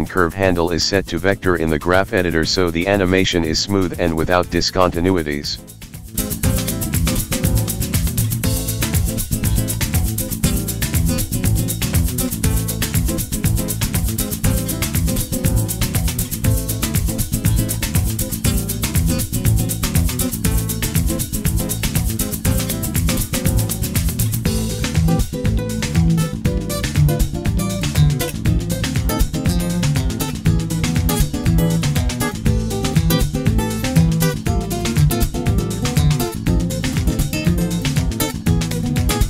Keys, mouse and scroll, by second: 0.3-1.4 scroll down 5, 1.0 click, 2.1 v, 3.0 click, 3.4 click, 3.9 v, 5.7 click, 7.1 space, 7.4 click, 9.0 space, 9.4 click, 10.2 click, 11.4 shift+a, 12.7 Tab, 13.3 BackSpace, 13.9 v, 14.5 Tab, 15.0 click, 16.9 click, 18.1 click, 19.6 click, 20.6-21.2 scroll up 2, 21.2 Tab, 21.9 a, 23.0 f, 23.7 Tab, 24.3 click, 26.5 r, 28.0 click, 31.0 g, 33.5 shift+a, 36.0 Tab, 36.4-36.9 scroll up 3, 36.9 click, 36.9 scroll up 2, 38.1 shift+a.